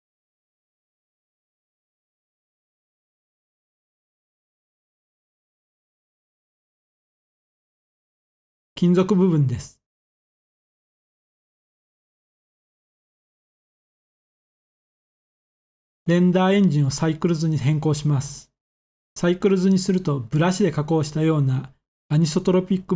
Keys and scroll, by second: 12.0-12.4 typing, 12.9 Return.